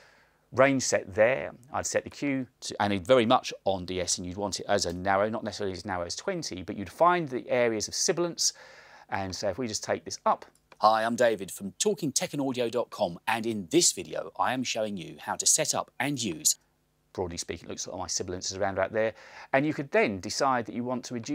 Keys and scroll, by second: 3.9-4.7 typing, 5.0 Return, 10.7 space, 16.6 space.